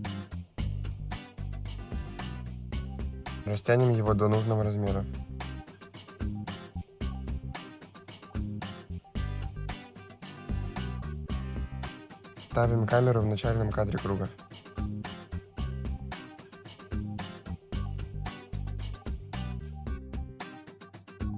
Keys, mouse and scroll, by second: 2.5 click, 3.6 click, 7.2 middle click, 8.8 click, 9.2 click, 13.5 click, 14.6 click, 15.8 middle click, 20.6 click.